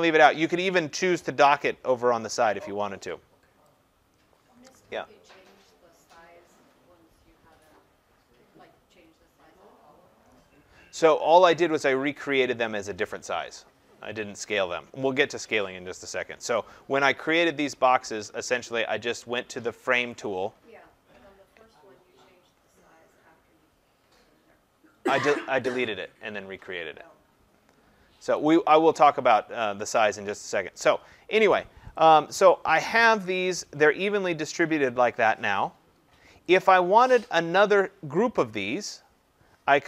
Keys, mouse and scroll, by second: 3.6 click, 12.5 click, 16.6 click, 20.1 click, 28.4 click, 32.4 click, 33.1 Delete, 36.6 click, 37.8 click.